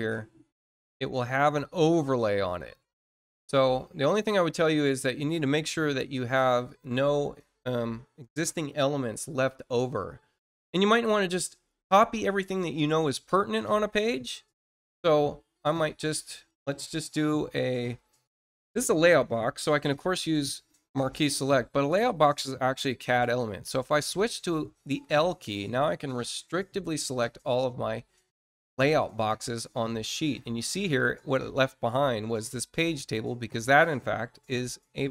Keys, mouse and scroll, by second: 3.2 click, 4.4 click, 5.9 click, 6.6 click, 14.6 click, 18.2 click, 26.2 shift+click, 32.2 middle click.